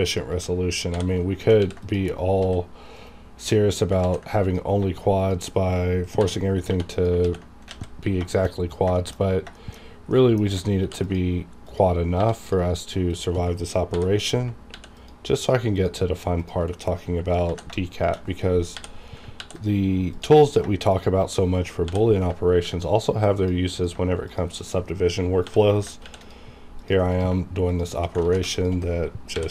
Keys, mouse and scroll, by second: 0.1 shift+click, 0.9 j, 1.6 ctrl+r, 1.8 click, 2.1 right click, 2.4 s, 3.0 right click, 4.0 ctrl+z, 4.4 click, 6.2 j, 6.7 j, 6.9 click, 7.2 ctrl+x, 7.7 alt+a, 8.0 scroll down 2, 8.3 shift+middle click, 8.5-8.8 scroll down 2, 8.9 shift+middle click, 9.2 scroll down 2, 9.5 shift+middle click, 10.8 ctrl+r, 11.0 ctrl+click, 11.6 click, 12.0 scroll up 1, 12.2 1, 12.4 click, 13.1 shift+click, 13.9 j, 14.7 ctrl+r, 15.0 click, 16.4 shift+click, 17.5 ctrl+z, 17.9 shift+click, 18.7 j, 19.4 ctrl+r, 19.5 ctrl+click, 20.1 click, 20.9 shift+click, 21.8 j, 22.5 ctrl+r, 22.7 ctrl+click, 23.3 click, 24.3 shift+click, 25.4 j, 26.0 ctrl+r, 26.2 click, 27.7 shift+click, 28.2 ctrl+z, 28.5 shift+click, 29.2 shift+scroll up 1.